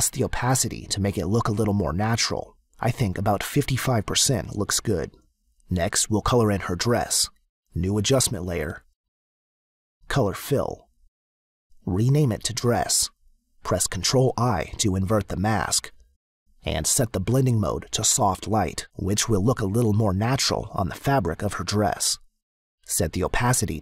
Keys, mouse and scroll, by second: 2.1 click, 4.6 click, 8.8 click, 10.7 click, 11.8 click, 12.0-13.0 typing, 13.5 click, 15.2 ctrl+i, 17.5 click, 19.7 click, 23.2 click.